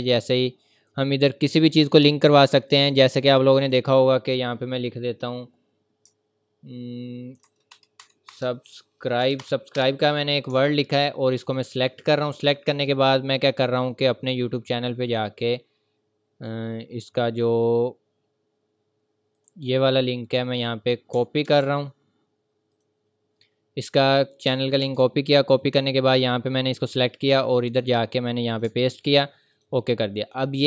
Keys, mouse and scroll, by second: 2.7 click, 9.2 Up, 9.4 Return, 9.7 BackSpace, 10.5-11.0 ctrl+scroll up 1, 11.4 click, 17.8 scroll down 1, 19.4 click, 22.7 click, 25.6 click, 29.5 click.